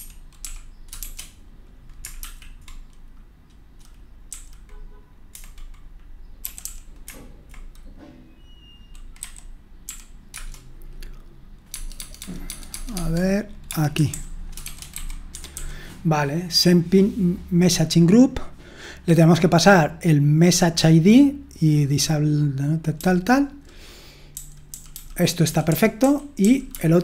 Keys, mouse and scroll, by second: 0.2-2.7 typing, 6.1-7.1 typing, 9.6-10.3 typing, 11.7 Tab, 11.9 Tab, 12.2 Tab, 12.5 Tab, 13.7-15.6 typing, 15.3 Escape, 24.3-24.9 typing, 26.4-27.0 typing.